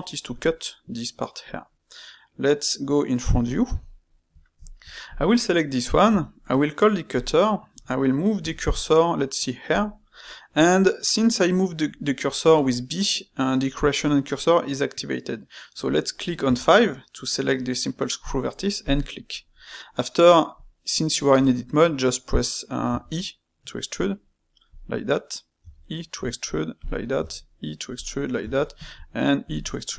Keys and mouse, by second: 3.2 KP_1, 3.9-5.0 shift+middle drag, 5.0 click, 6.0 space, 25.6 e, 29.7-29.9 middle drag.